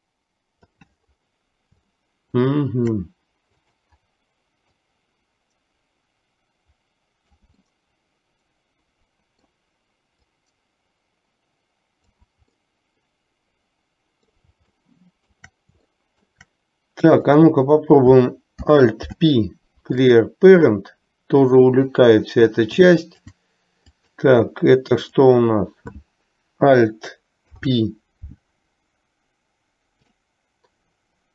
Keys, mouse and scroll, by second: 2.1-2.6 shift+middle drag, 3.6 click, 4.9-7.6 drag, 7.9-9.7 middle drag, 10.4-12.4 drag, 12.7-14.5 middle drag, 14.9 shift+middle click, 16.1-16.5 shift+middle drag, 17.1 click, 19.1 alt+p, 23.2 alt+click, 23.9 click, 25.1 click, 27.5 alt+p.